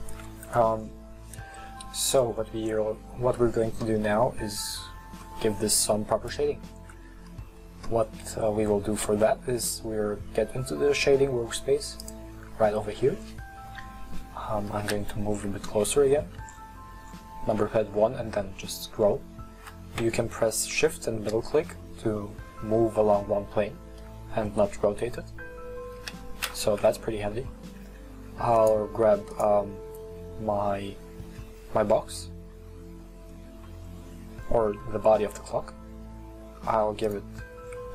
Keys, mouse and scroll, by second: 2.1-2.9 middle drag, 2.9-3.4 scroll down 1, 3.4-4.1 scroll down 1, 4.1-6.7 middle drag, 6.7-7.3 scroll down 1, 7.3-10.5 middle drag, 12.3 drag, 14.8 KP_1, 15.4 scroll up 8, 16.0-16.5 shift+middle drag, 16.7-17.8 scroll up 10, 17.8-19.0 shift+middle drag, 19.0 scroll up 4, 20.9-24.0 shift+middle drag, 24.5-26.0 middle drag, 26.0 KP_1, 27.0-28.6 shift+middle drag, 28.6 right click, 29.3 right click, 37.6 click.